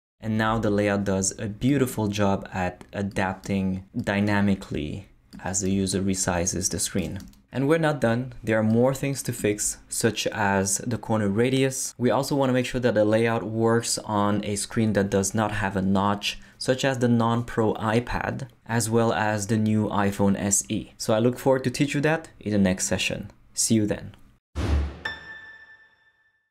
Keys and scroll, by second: 0.5 super+Right.